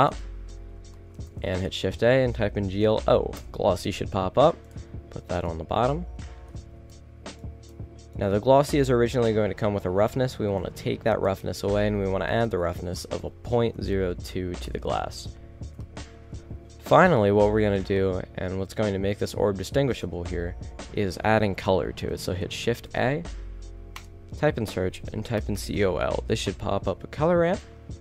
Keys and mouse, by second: 0.1 middle click, 18.2-20.1 middle drag, 20.2 KP_0, 23.0 KP_0.